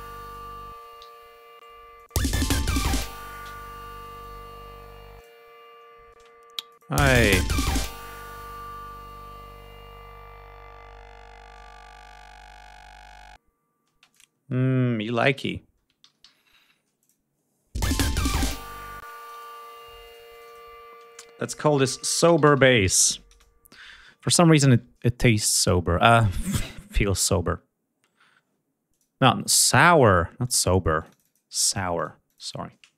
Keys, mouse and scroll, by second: 0.9 g, 1.4 space, 1.8 click, 4.1 click, 6.0 ctrl+space, 6.6 click, 6.8 space, 8.4 ctrl+scroll up 2, 10.1 ctrl+scroll down 2, 13.8 space, 14.0 ctrl+click, 15.1 alt+d, 15.4 ctrl+alt+scroll down 2, 15.9 ctrl+alt+d, 16.9 click, 17.6 ctrl+space, 18.2 click, 18.9 space, 19.0 click, 19.9-20.6 drag, 21.4-23.3 typing, 25.3 click, 28.7 click, 29.8 click, 30.3 click, 30.8 click, 32.1 click, 32.6-32.9 typing.